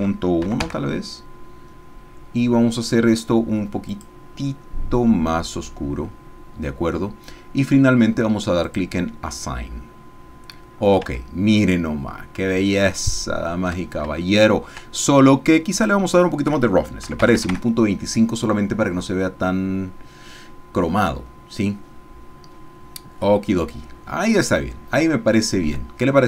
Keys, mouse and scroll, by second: 3.9 click, 8.6-10.3 drag, 11.8 Tab, 12.7-13.8 shift+drag, 14.2 shift+click, 15.7 click, 17.0 KP_Decimal, 17.5 KP_Enter, 24.9 scroll down 2, 25.1 shift+middle click, 26.0 shift+scroll up 2.